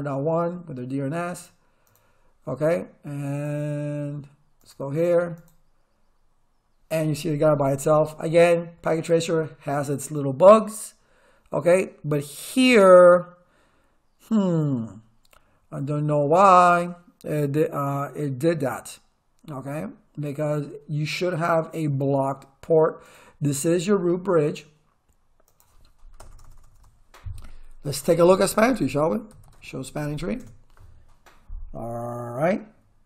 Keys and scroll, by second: 26.2 Return, 27.7-30.3 typing, 30.4 Return.